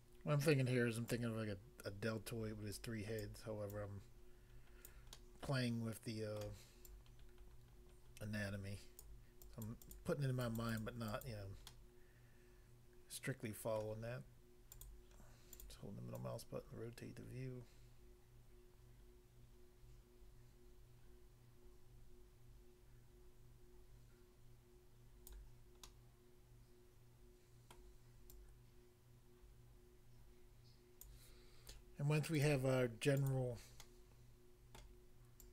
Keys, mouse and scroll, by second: 1.1 click, 3.2 click, 3.7 click, 4.9 click, 5.1 middle click, 6.5 middle click, 6.9 click, 9.0 click, 9.5 click, 9.7 click, 10.6 click, 10.7 click, 10.8 click, 11.1 click, 11.2 click, 11.7 middle click, 13.8 middle click, 14.7 click, 14.8 click, 15.5 click, 15.6 click, 16.1 click, 25.3 click, 25.9 middle click, 27.7 middle click, 28.3 click, 31.0 click, 32.4 click, 32.5 click, 33.2 click, 33.3 click, 33.9 middle click, 34.7 middle click, 35.4 click.